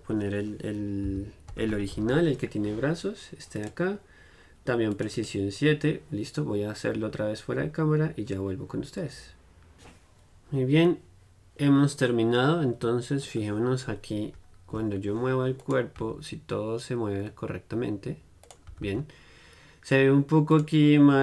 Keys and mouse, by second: 13.5-15.7 middle drag, 15.7-21.2 right drag, 18.8 r.